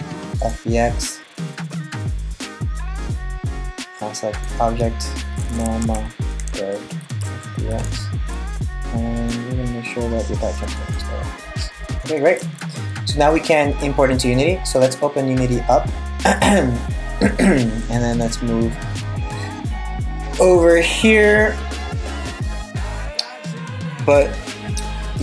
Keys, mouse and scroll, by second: 12.1 super+s, 24.8 middle click.